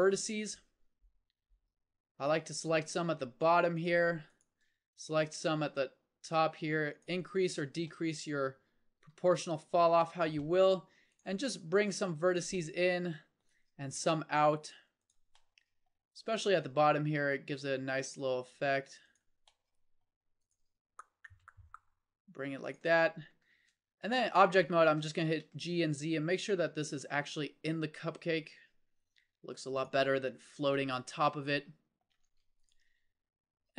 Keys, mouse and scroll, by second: 4.6 g, 9.1 g, 10.2 middle click, 10.5 middle click, 11.4 g, 13.9 click, 14.2 g, 16.8 g, 20.7 g, 23.0-24.1 middle drag, 23.5 Tab, 24.8 g, 30.1-32.1 middle drag, 32.1 Tab, 32.9 g.